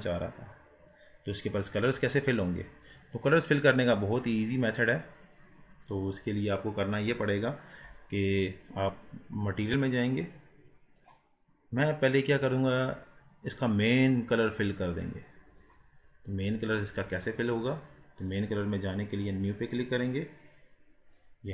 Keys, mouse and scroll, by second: 2.2 scroll up 2, 2.9 scroll down 3, 11.1 click, 12.5-15.6 drag, 16.3-17.2 drag, 17.2-17.9 scroll down 1, 17.9-19.3 middle drag, 19.3-21.5 drag.